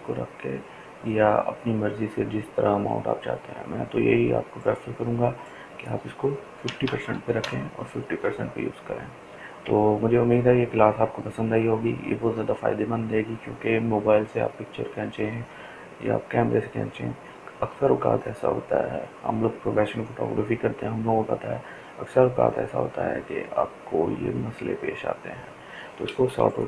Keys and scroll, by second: 5.8-6.8 typing, 6.8 Return, 7.8-9.9 typing.